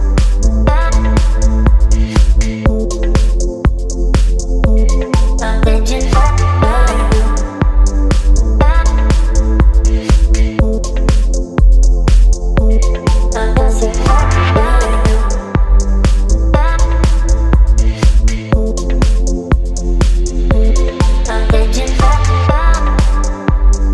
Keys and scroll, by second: 17.5 KP_6, 17.6 KP_6, 23.1 space.